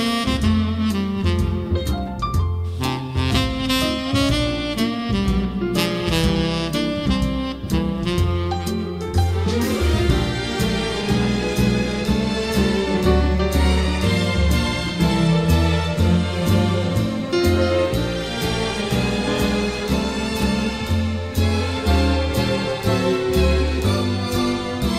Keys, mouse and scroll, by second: 1.2 scroll, 1.4 scroll down 8, 1.6-3.7 scroll up 11, 6.6 scroll up 10, 9.2-10.4 drag, 10.4-10.7 scroll down 7, 10.7 scroll up 10, 10.8-15.7 middle drag, 10.8-11.5 scroll, 12.0 scroll, 15.7-17.7 drag, 17.7-19.3 typing, 17.9 Tab, 18.4 Tab, 18.4 click, 21.1-23.2 drag, 23.2 1.